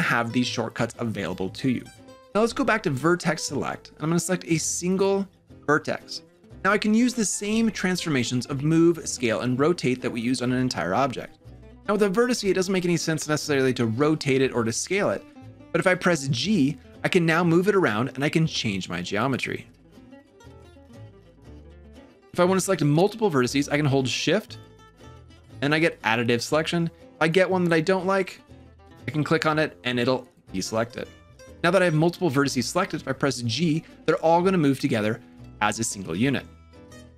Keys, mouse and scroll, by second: 1.9 3, 3.5 1, 4.7 click, 15.9 g, 20.6 g, 24.4 shift+click, 25.5 shift+click, 27.1 shift+click, 28.2 shift+click, 30.0 shift+click, 31.4 g, 33.3 g.